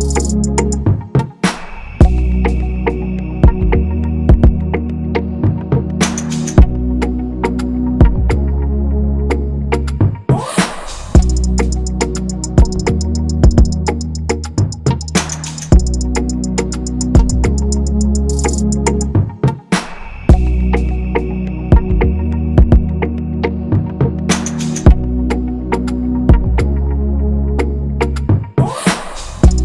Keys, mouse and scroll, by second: 8.6 i, 28.9 ctrl+c, 29.3 ctrl+f.